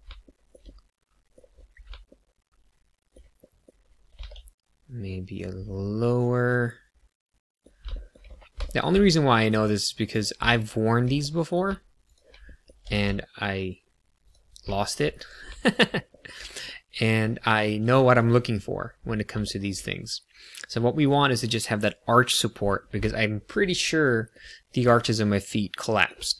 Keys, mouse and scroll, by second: 0.2 shift+middle click, 0.5 middle click, 1.4 scroll down 1, 2.0 shift+middle click, 3.4 middle click, 4.0 g, 4.1 z, 5.2 click, 5.7 middle click, 7.9 shift+middle click, 8.2 scroll up 1, 8.7 shift+middle click, 9.0 middle click, 10.0 click, 10.5 shift+middle click, 11.3 middle click, 12.1 shift+click, 12.4 middle click, 12.7 g, 12.8 z, 14.2 click, 14.7 shift+middle click, 15.1 KP_1, 16.0 shift+middle click, 16.6 middle click, 18.6 scroll down 1, 19.4 shift+middle click, 19.8 middle click, 23.0 shift+middle click, 24.9 shift+middle click.